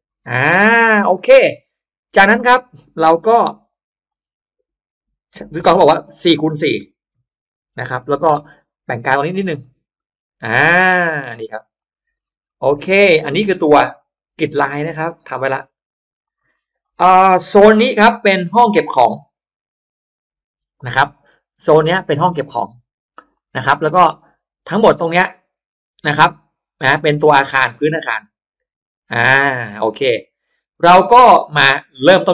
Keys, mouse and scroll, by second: 0.1 middle click, 0.3 Return, 0.3 space, 0.6 middle click, 0.6 scroll up 1, 0.8-1.8 scroll down 2, 1.2 middle click, 2.3 click, 3.3 m, 3.8 click, 5.5 4, 5.8 Return, 7.0-8.1 typing, 9.5 click, 11.7 click, 12.1 space, 12.3 middle click, 13.2-13.6 middle drag, 13.7 click, 14.0 click, 14.8 right click, 15.3 right click, 16.1 click, 16.5-17.3 scroll up 2, 16.8 click, 17.0 middle click, 18.1 shift+x, 18.4-23.1 shift+drag, 24.7-31.3 shift+drag, 25.6 shift+x, 31.9 shift+right click.